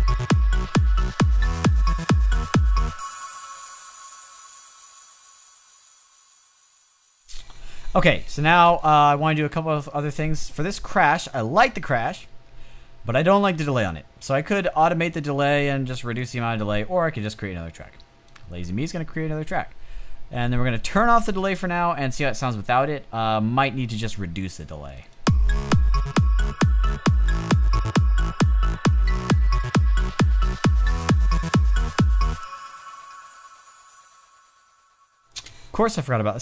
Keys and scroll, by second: 8.3 space, 35.2 space.